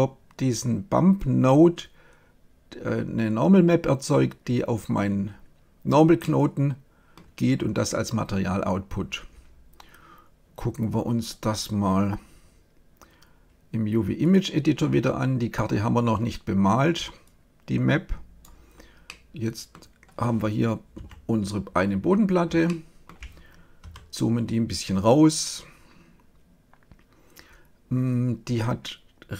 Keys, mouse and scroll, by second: 7.2-11.1 middle drag, 11.1-13.0 drag, 17.2-19.0 drag, 19.0-20.9 middle drag, 20.9 KP_7, 22.1 middle click, 23.7 KP_Divide.